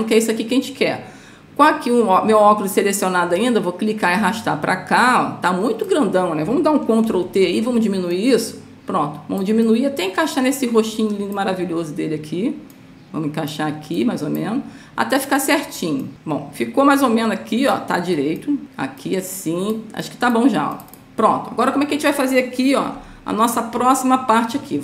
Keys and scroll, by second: 7.4 ctrl+t, 23.3 Up.